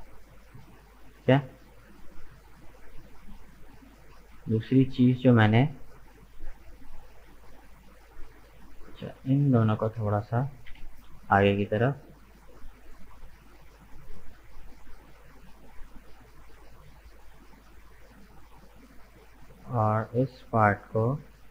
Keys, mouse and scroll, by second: 0.6 middle click, 1.6 right click, 2.0-5.0 middle drag, 5.3-7.5 middle drag, 7.5-9.0 drag, 9.0 right click, 9.4 shift+right click, 10.5 g, 13.7-16.7 middle drag, 18.4 middle click, 19.3 right click, 19.7-21.2 middle drag, 21.2 shift+right click.